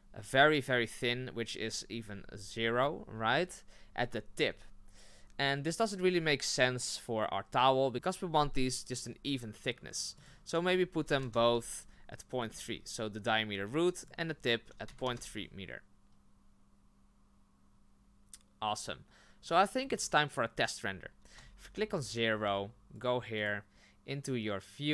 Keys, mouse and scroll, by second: 13.3-17.6 drag, 19.3-20.4 scroll down 8, 21.3 KP_0, 23.4-24.9 drag.